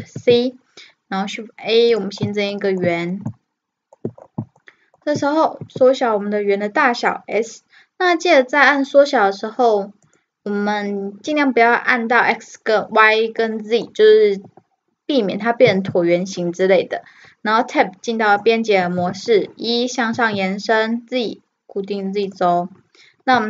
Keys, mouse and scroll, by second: 0.0 shift+a, 2.6-3.6 middle drag, 3.7 middle click, 4.2 middle click, 4.7-6.5 middle drag, 15.7 Tab, 19.0 e.